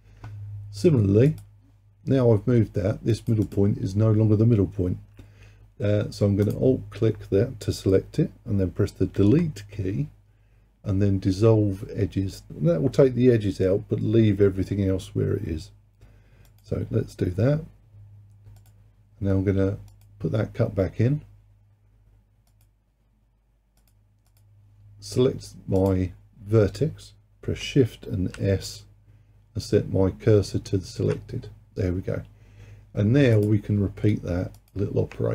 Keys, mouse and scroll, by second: 1.3-3.4 drag, 3.5 click, 6.5 alt+click, 9.2 Delete, 18.6-24.0 drag, 24.3-25.9 drag, 28.4 shift+s, 33.4-34.8 drag.